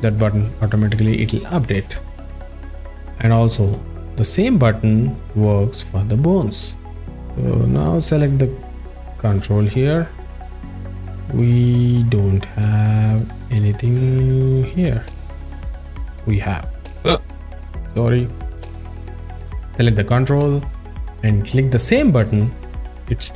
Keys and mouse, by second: 2.3 click, 3.6 ctrl+Tab, 7.1 ctrl+alt+f, 7.1 ctrl+alt+middle click, 8.3 ctrl+Tab, 8.5 click, 9.1 alt+shift+middle click, 9.6-9.9 alt+middle drag, 10.5-13.4 drag, 14.5 click, 15.2 a, 18.2 alt+shift+middle click, 18.9 click, 19.4 alt+middle click, 20.3 alt+shift+middle click.